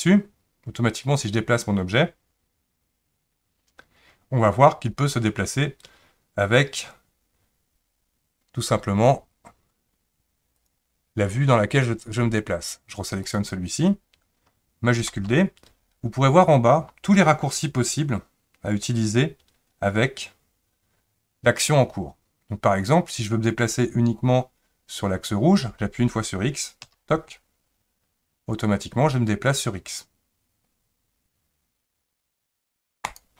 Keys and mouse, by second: 13.2 click, 15.1 shift+d.